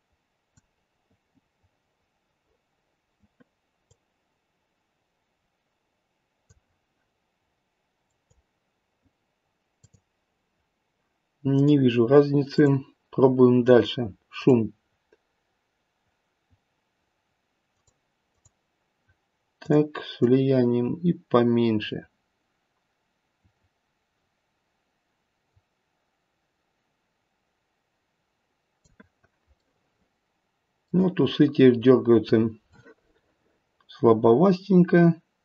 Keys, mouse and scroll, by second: 3.8 click, 8.1 click, 9.8 click, 11.5 click, 12.5 click, 17.7 click, 18.2 click, 19.6 click, 20.1 click, 29.6 middle click.